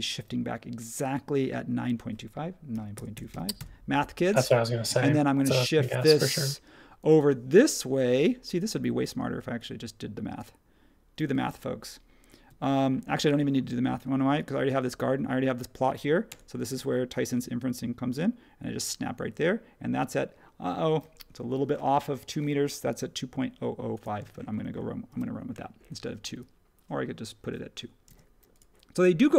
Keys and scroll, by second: 2.5-4.4 typing, 16.2 Right, 24.2 space, 25.1 super+1, 26.0 space.